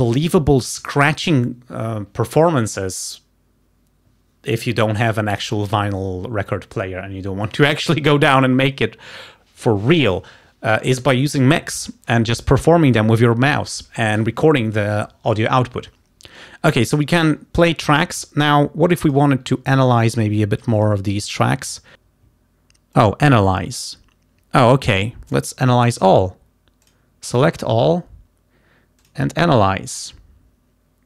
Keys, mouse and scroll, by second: 19.2 click, 20.8 ctrl+shift+click, 21.3 ctrl+shift+right click, 23.1 click, 27.0 click, 29.0 click.